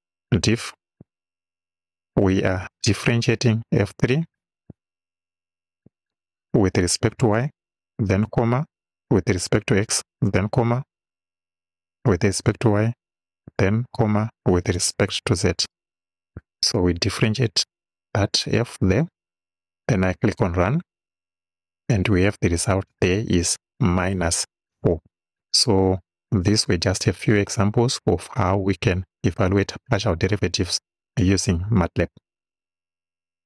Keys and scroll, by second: 1.0 i, 1.5 f, 2.3 shift+f, 2.6 shift+9, 3.9 f, 4.4 3, 5.9 ,, 7.4 y, 8.3 ,, 9.5 x, 12.4 y, 14.8 z, 15.7 Right.